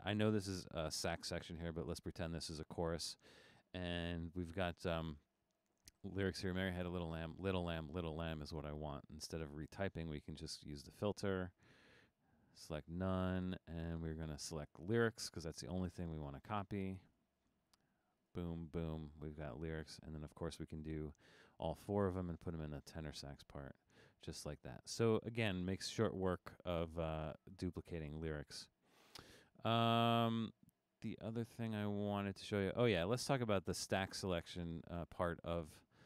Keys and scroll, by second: 17.8 typing.